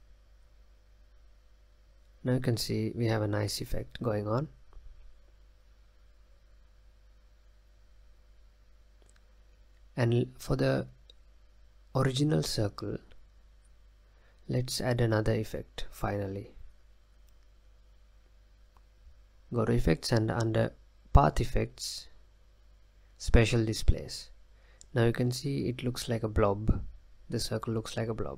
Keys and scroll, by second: 0.4 space, 2.4 space.